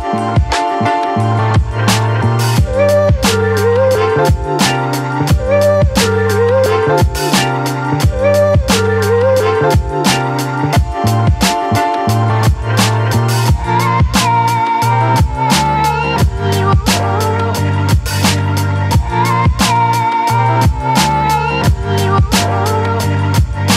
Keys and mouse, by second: 0.0 middle click, 1.9 ctrl+z, 2.2 [, 2.5 [, 2.7 click, 3.4 ctrl+z, 3.6-5.2 drag, 5.4 click, 8.0 middle click, 8.6 shift+middle click, 9.2 shift+middle click, 9.5 middle click, 10.6 ctrl+i, 11.2 shift+middle click, 11.8 b, 13.0 b, 14.7 b, 15.6 b, 16.6 b, 17.9 b, 18.9 b, 20.0 b, 21.1 middle click, 21.6 b, 22.5 b, 23.2 b.